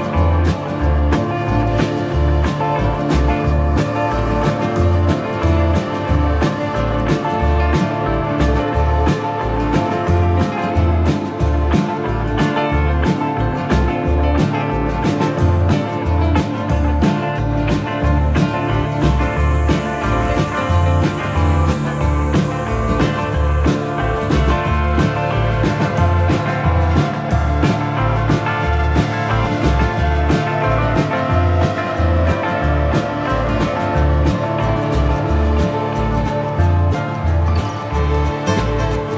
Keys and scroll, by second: 4.3 F3, 5.8 shift+F2, 6.4 Escape, 11.5 shift+Page_Up, 22.3 Delete, 25.3 Delete.